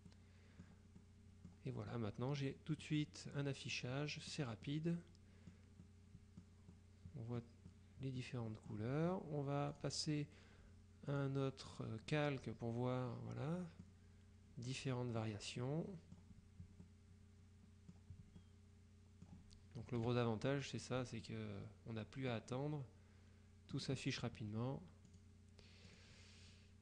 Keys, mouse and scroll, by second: 0.2-1.2 drag, 2.0 click, 4.0 click, 5.9 click, 6.8 click, 7.8 click, 8.6 click, 9.8 click, 11.2 click, 13.2-14.4 drag, 14.8-15.8 drag, 16.9 click, 17.1-18.5 middle drag, 20.1 KP_Subtract, 21.3-22.9 drag, 25.2 click, 26.0 click.